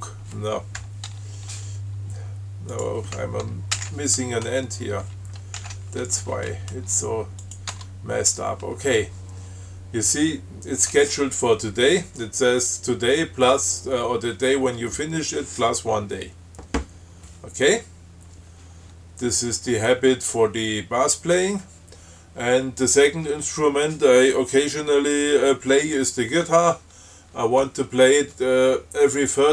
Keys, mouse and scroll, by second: 1.1 BackSpace, 1.4 Tab, 3.0 click, 4.1 shift+d, 5.9 shift+., 7.7 click, 8.0 Tab.